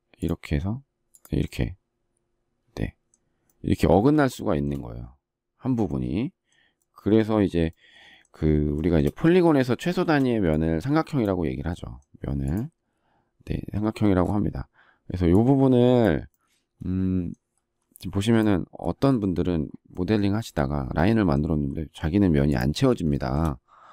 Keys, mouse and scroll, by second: 8.7 shift+middle click, 10.0 space, 23.1 shift+middle click.